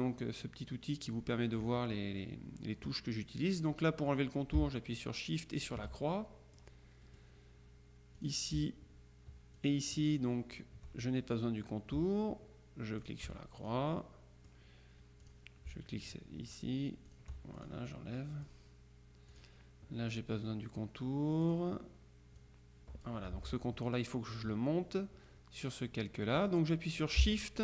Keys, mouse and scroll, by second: 5.7 shift+click, 7.1 click, 8.2 click, 9.6 shift+click, 13.0 shift+click, 14.1 shift+click, 15.3 click, 17.2 shift+click, 18.0 shift+click, 18.4 click, 19.4 click, 21.5 click, 22.5-23.6 drag, 23.4 ctrl+z.